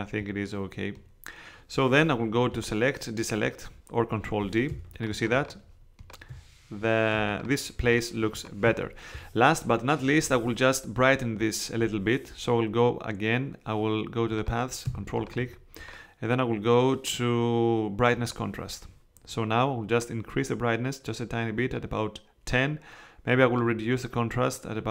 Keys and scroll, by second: 4.7 super+space.